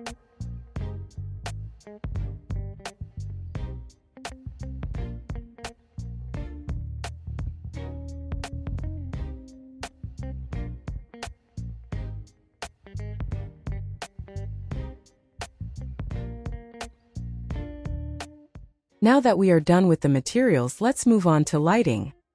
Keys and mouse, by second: 0.3 shift+middle click, 1.8 g, 2.0 middle click, 3.0 click, 3.6 s, 5.7 click, 6.0-7.4 middle drag, 7.7 alt+z, 8.5 r, 9.5 g, 12.9 r, 15.1 middle drag, 16.0 middle click, 17.0 s, 20.2 g, 21.7 alt+z.